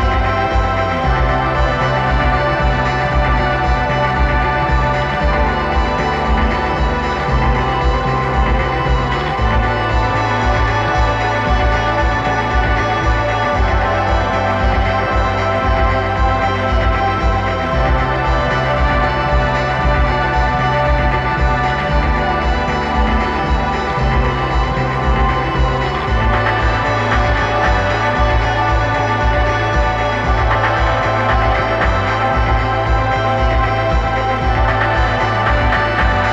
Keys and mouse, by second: 4.1-5.3 drag, 5.3 middle click, 7.4-8.4 middle drag, 8.4-10.2 drag, 11.2 click, 14.4 click, 18.6-20.4 drag, 23.8-25.7 drag, 34.8-36.3 drag.